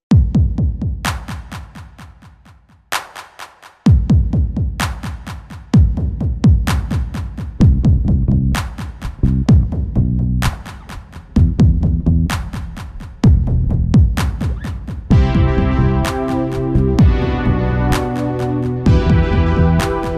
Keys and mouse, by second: 0.2 click, 0.4 middle click, 0.7-4.3 middle drag, 0.9 ctrl+s, 4.5 r, 7.5-8.5 middle drag, 8.6 middle click, 8.8 middle click, 9.0 middle click, 9.8 middle click, 10.7-12.6 right drag, 12.6-16.7 drag, 16.5 t, 19.9 ctrl+s.